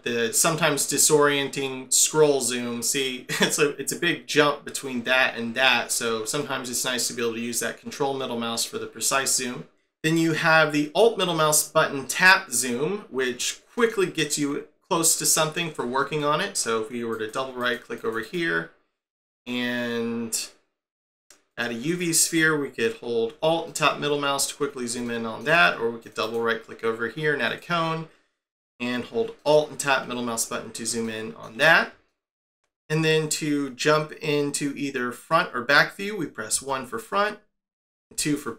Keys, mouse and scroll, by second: 0.3 scroll down 1, 0.8 scroll up 1, 2.2 scroll down 1, 3.3-3.6 scroll up 1, 3.7 scroll down 1, 4.8-5.4 scroll up 1, 5.4-6.4 scroll down 1, 6.4 ctrl+middle click, 10.1 scroll down 2, 13.7 alt+middle click, 15.4-16.2 scroll down 8, 16.2 shift+middle click, 17.1 right click, 17.6 right click, 18.2 right click, 23.6 alt+middle click, 24.5 scroll down 2, 25.0 shift+middle click, 26.0 right click, 26.2 right click, 29.4 alt+middle click, 30.3 scroll down 4, 31.0 shift+middle click, 31.6-32.1 scroll down 4, 32.1 shift+middle click, 36.5 1, 38.1 2.